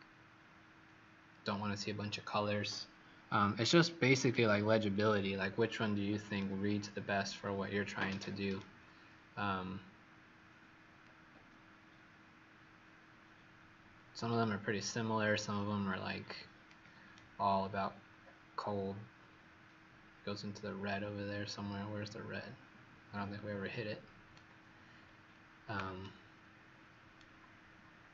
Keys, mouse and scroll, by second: 5.1 scroll down 1, 5.8 scroll up 2, 6.4 right click, 11.0 click, 17.1 right click, 25.0 scroll down 1, 26.0 right click.